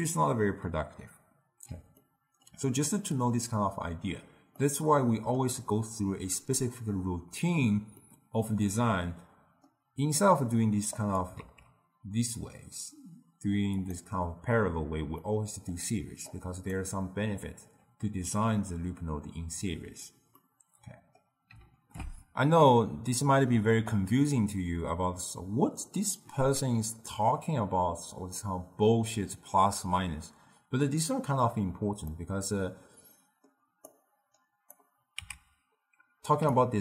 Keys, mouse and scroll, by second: 1.9-7.6 ctrl+middle drag, 7.9-10.9 middle drag, 10.9 click, 11.3 shift+d, 15.2-16.2 middle drag, 16.2-19.3 drag, 20.3-21.7 middle drag, 21.7 ctrl+alt+shift+w, 32.2-34.0 middle drag, 34.0-35.2 drag, 35.2 x, 36.5 d, 36.6-36.8 right drag.